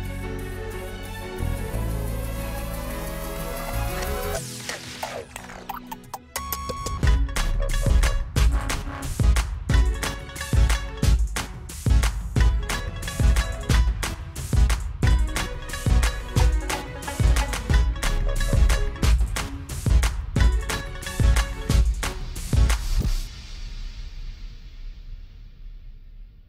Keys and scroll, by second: 7.5 Caps_Lock, 7.8 v, 8.5 e.